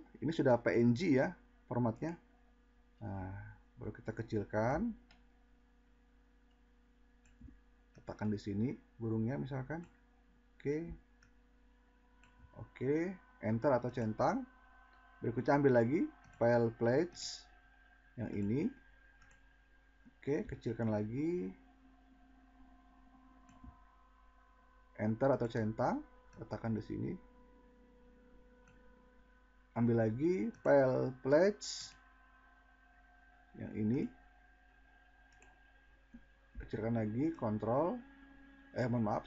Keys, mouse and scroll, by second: 2.0 click, 4.7 click, 19.3 click, 20.7 click, 35.3 drag, 37.2 click.